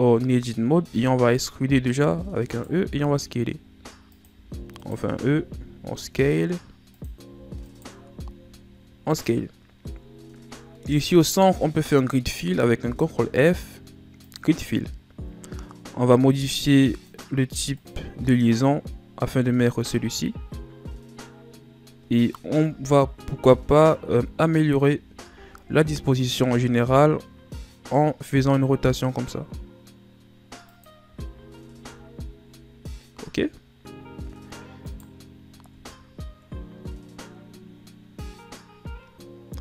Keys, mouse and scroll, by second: 0.8 z, 2.0 e, 9.5-10.8 scroll up 5, 10.8-12.9 middle drag, 12.9 ctrl+f, 17.0-20.8 drag, 21.2 scroll down 2, 22.6 KP_7, 23.9-24.5 shift+scroll up 1, 24.5-24.9 scroll up 1, 24.9 a, 25.3 a, 26.3 r, 31.0 z, 31.4 scroll down 2, 32.0-32.9 ctrl+scroll up 5, 32.9-34.0 scroll up 1, 34.8 right click, 35.7 Tab.